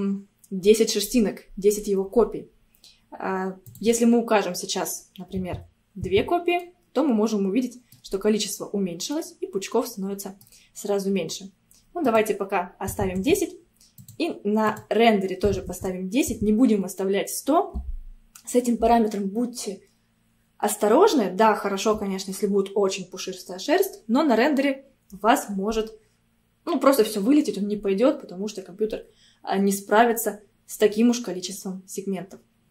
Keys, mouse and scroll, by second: 3.7-6.7 drag, 6.7-8.4 middle drag, 8.4-8.9 scroll down 2, 9.2-12.1 middle drag, 12.1-14.3 drag, 14.7-17.9 drag.